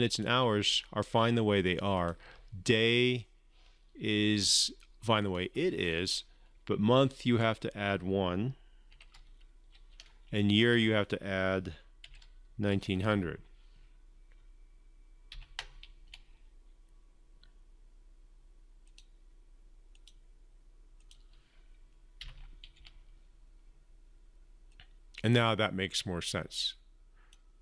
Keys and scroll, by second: 15.1 ctrl+F5, 22.0 ctrl+F5.